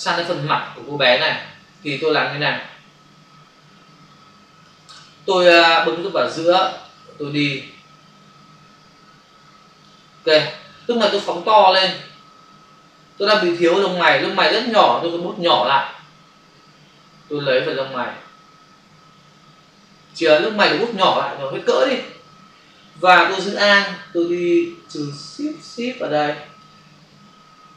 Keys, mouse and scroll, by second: 6.9 click, 11.1 space, 11.6 ctrl+click, 15.4 typing, 16.7-17.2 typing, 17.6 click, 21.1-22.2 typing, 23.8 alt+click.